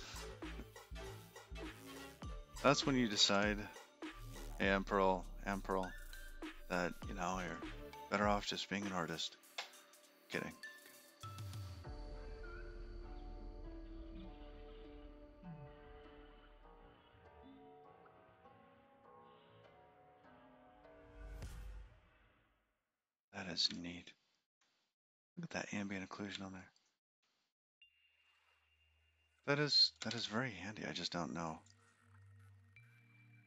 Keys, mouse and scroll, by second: 5.3 ctrl+b, 12.4-13.8 scroll up 27, 14.6-15.6 click, 14.8 click, 15.2 click, 15.8 click, 16.0 click, 21.0-21.4 scroll up 3, 22.9 click, 23.8-24.1 scroll up 3, 24.6 shift+middle click, 24.6 shift+scroll up 1, 26.6-27.0 scroll up 4, 27.4 shift+middle click, 31.6 ctrl+b.